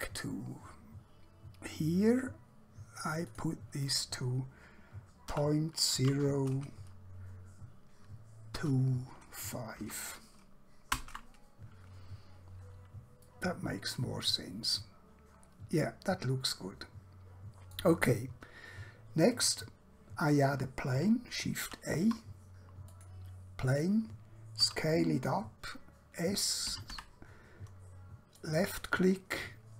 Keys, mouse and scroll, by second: 3.3 click, 5.2-6.0 typing, 8.3-9.8 typing, 11.0 Return, 13.3 middle click, 18.2-19.2 scroll down 1, 19.2-19.5 scroll up 1, 21.6 shift+a, 23.0 click, 24.6 s, 26.6-27.0 typing, 28.4 click, 29.5-29.7 scroll down 1.